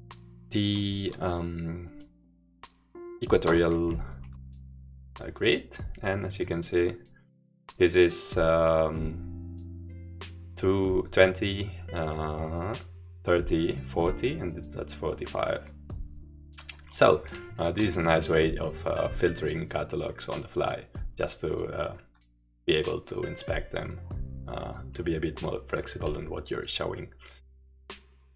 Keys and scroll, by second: 3.8 shift+q.